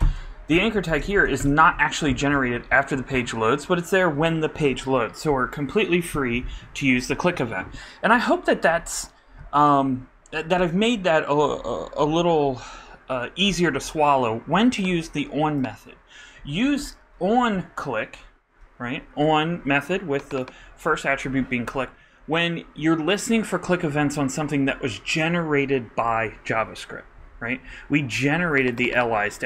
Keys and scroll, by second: 0.0-1.6 typing.